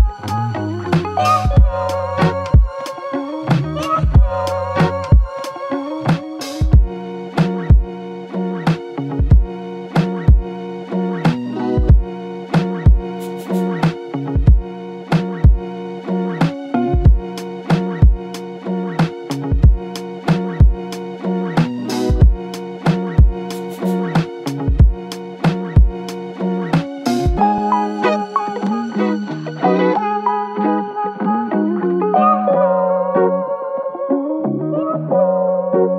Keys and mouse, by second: 1.3 f, 1.4 shift+click, 3.0 shift+click, 4.0 alt+click, 6.2 alt+click, 7.2 shift+click, 10.4 shift+click, 11.0 typing, 12.6 typing, 12.7 double click, 22.9 double click, 25.4 f, 31.8 shift+click.